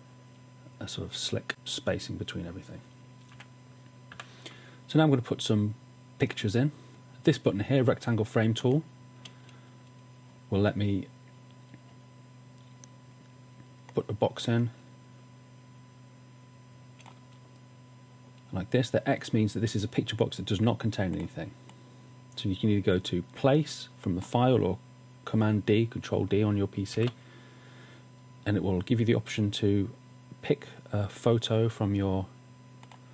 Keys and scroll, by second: 4.1 typing, 27.0 super+d.